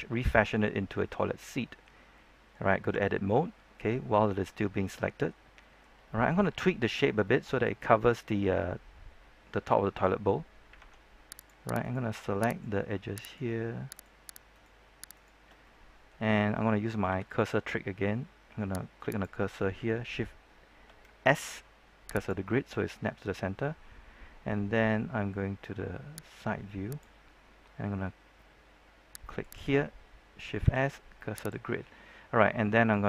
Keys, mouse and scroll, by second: 2.8 Tab, 3.2-6.3 middle drag, 11.3 ctrl+Tab, 11.3 click, 11.7 right click, 12.4 shift+right click, 13.2 shift+right click, 15.6 middle click, 17.0 KP_7, 19.0 click, 21.2 shift+s, 22.1-30.1 drag, 30.6 shift+s, 31.3 click.